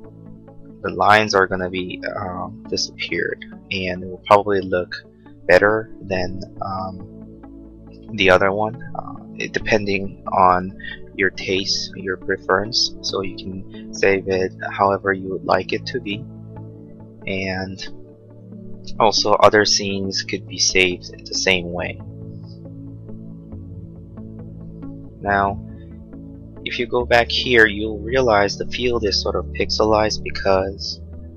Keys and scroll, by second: 19.5 Right.